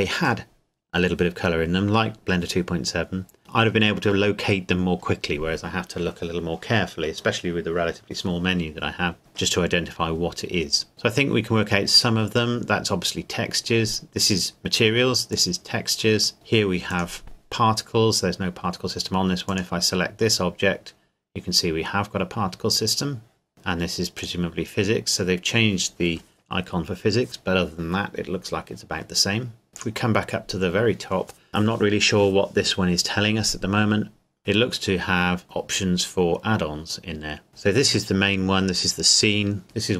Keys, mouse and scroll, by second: 15.3 click, 19.5 click, 23.5 click, 24.1 click, 29.7 click, 37.5 click.